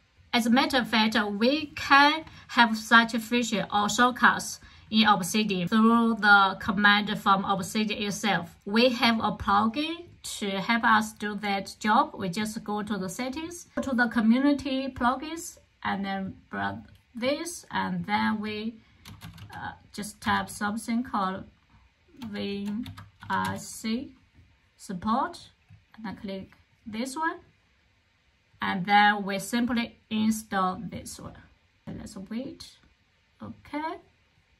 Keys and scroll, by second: 18.7-20.6 typing, 22.1-24.0 typing, 25.1-25.8 typing.